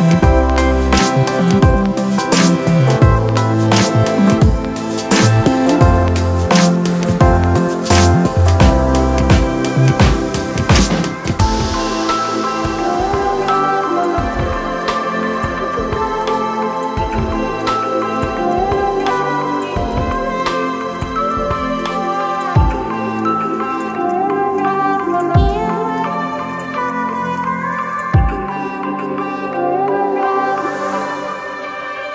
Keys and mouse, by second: 1.7 right click, 2.9 click, 3.8 click, 5.1 click, 8.8 click, 8.9 alt+BackSpace, 10.5 ctrl+d, 16.2-20.1 drag, 20.1 ctrl+-, 23.4 ctrl+t, 24.7-27.5 drag, 29.8-32.1 drag.